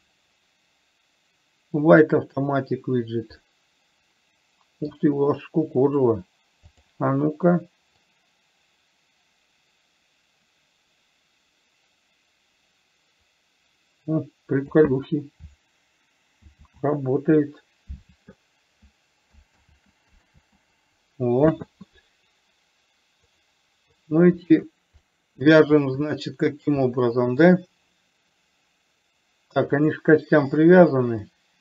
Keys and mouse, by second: 3.7-5.3 middle drag, 7.2 click, 8.6-15.2 drag, 16.8 ctrl+z, 19.9 ctrl+z, 20.7 ctrl+z, 23.7 click, 25.4 middle click, 26.4 shift+middle click, 27.3 middle click, 30.3 click.